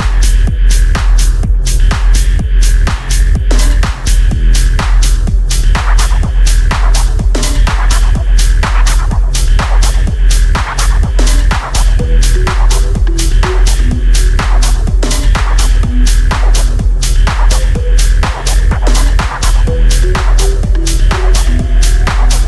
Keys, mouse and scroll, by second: 0.5 click, 7.8 click, 12.4 scroll down 1, 13.2 scroll up 1, 13.5 click, 15.4 scroll down 1, 16.4 click.